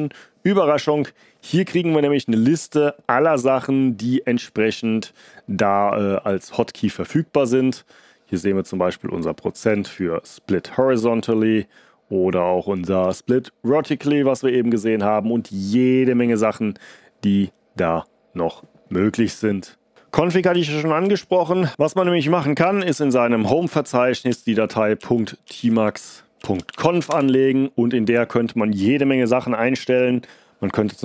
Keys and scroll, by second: 20.9 ctrl+c, 22.3-27.3 typing, 25.5 Tab.